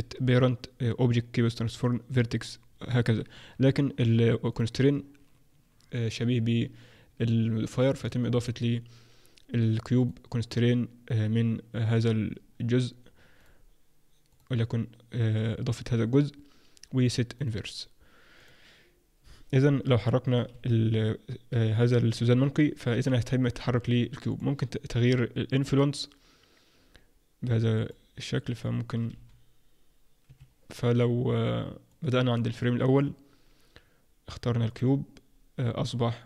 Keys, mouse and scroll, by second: 4.5 click, 8.4 click, 13.3 click, 16.9 click, 19.9 g, 21.5 g, 24.3 click, 29.1 g, 31.9 click, 34.7 click.